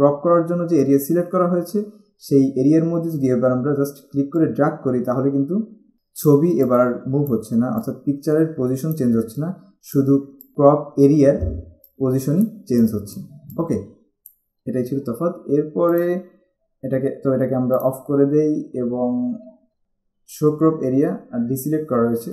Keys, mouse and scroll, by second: 4.5 click, 12.0 click, 16.1 click, 17.9 click.